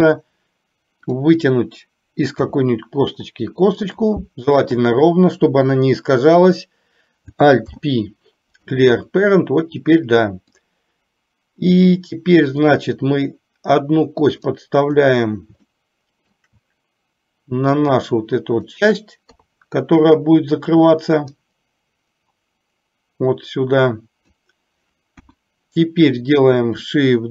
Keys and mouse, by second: 1.1 click, 2.4 e, 4.4 click, 7.7 alt+p, 10.7-11.9 drag, 12.8-15.1 drag, 15.9 shift+middle click, 17.7 click, 19.5 KP_3, 21.6-24.5 drag, 25.3 KP_1.